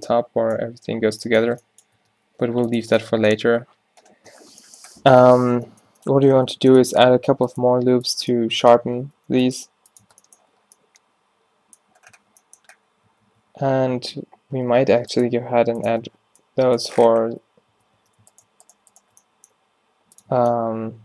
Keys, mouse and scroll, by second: 0.0 Tab, 1.1 Tab, 1.8 Tab, 2.1 Tab, 2.3 g, 2.9 Tab, 5.6 Tab, 7.0 ctrl+r, 8.2 Tab, 9.0 Tab, 9.2 ctrl+r, 10.1 Tab, 12.2 Tab, 13.3 ctrl+e, 14.8 ctrl+r, 16.0 Tab, 17.4 Tab, 17.8 Tab, 18.0 Tab, 19.6 g, 20.4 Tab.